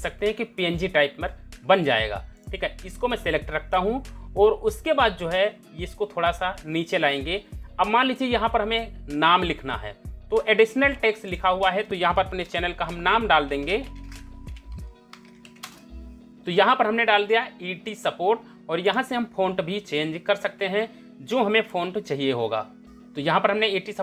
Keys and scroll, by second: 13.1-15.5 typing.